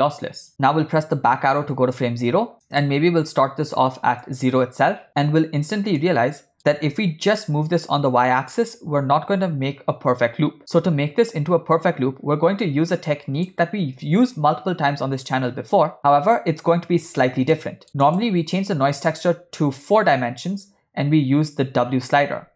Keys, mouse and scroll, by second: 1.3 Left, 2.7-4.2 drag, 6.1 ctrl+middle click, 7.5-13.5 shift+drag, 17.6 middle click, 18.1 drag, 19.1-20.9 drag.